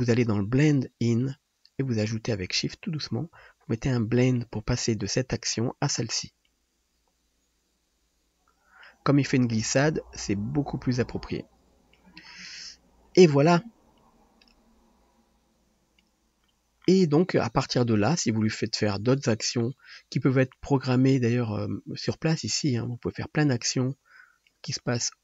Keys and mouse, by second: 1.3-25.0 shift+middle drag.